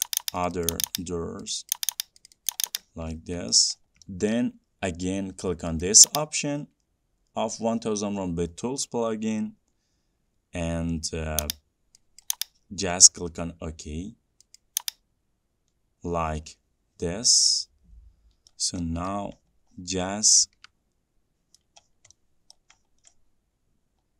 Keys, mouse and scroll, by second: 2.8 ctrl+click, 3.2 scroll down 4, 3.8 middle click, 3.8 scroll down 2, 4.7 middle click, 6.2 click, 11.8 click, 12.6 click, 14.9 click, 16.4 middle click, 16.5 middle click, 16.6 middle click, 18.5 ctrl+z, 18.5-19.0 scroll, 19.4 shift+middle click, 19.4 middle click, 19.8-20.8 scroll, 21.9 middle click, 21.9-22.5 scroll, 22.9 middle click, 23.2 scroll.